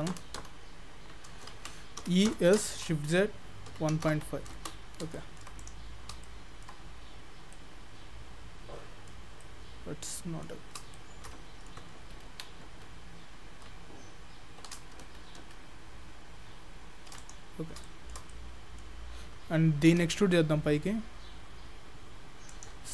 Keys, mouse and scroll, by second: 0.2 ctrl+z, 0.4 ctrl+z, 2.1 e, 5.2 shift+middle click, 5.6 click, 5.9 scroll down 1, 6.3 shift+middle click, 6.7-7.5 scroll down 4, 7.5 middle click, 9.2-10.4 scroll up 2, 9.4 middle click, 10.8 scroll up 1, 10.9 shift+middle click, 12.0 ctrl+z, 12.4 ctrl+z, 12.7 ctrl+z, 15.1 ctrl+shift+z, 15.5 ctrl+shift+z, 17.2 click, 17.9 shift+middle click, 18.3 middle click, 19.9 e.